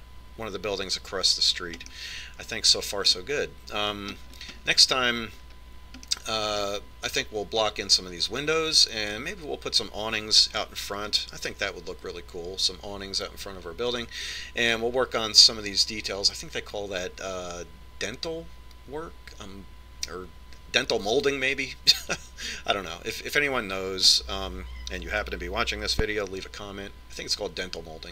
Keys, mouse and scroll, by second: 3.3-5.0 middle drag, 5.5-7.4 scroll down 1, 7.4-9.3 middle drag.